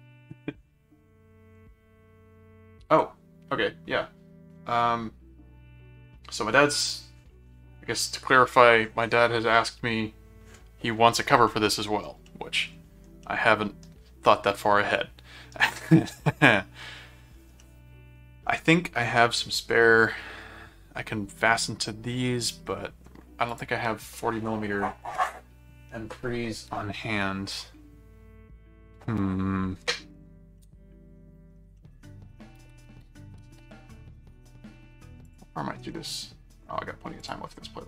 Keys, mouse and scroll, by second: 11.5 middle click, 12.2 middle click, 13.2-15.5 middle drag, 17.6 middle click, 21.3 middle click, 22.7 middle click, 23.5 click, 30.6 middle click, 31.8 middle click, 35.2 click, 37.2 click.